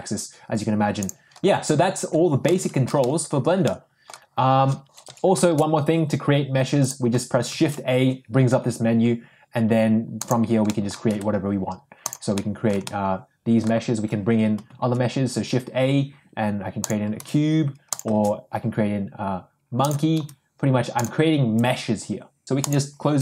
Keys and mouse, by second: 1.3 ctrl+z, 1.6 ctrl+z, 2.6-3.0 middle drag, 3.6-4.8 middle drag, 5.0 Delete, 5.4 shift+a, 7.4 shift+a, 10.7-11.1 middle drag, 11.1 s, 12.8-13.7 middle drag, 13.8 shift+s, 14.6 shift+a, 17.1 g, 18.1 shift+a, 20.1 g.